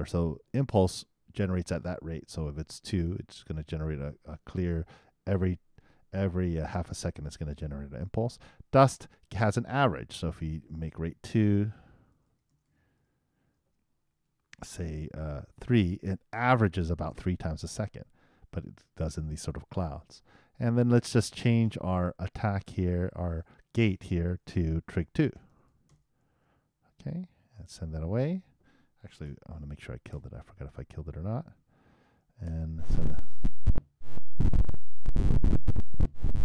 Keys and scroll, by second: 27.0 super+2, 29.2 super+., 30.1 super+Return, 32.4 super+Return, 33.5 super+Return.